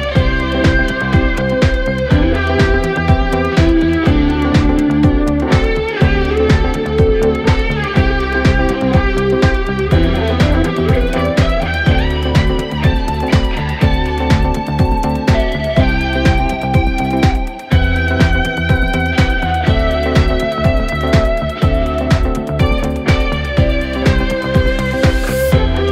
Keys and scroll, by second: 10.8 4, 13.5 4, 20.4 ctrl+d, 20.9 Escape, 23.5 3, 24.1 ], 25.0 4.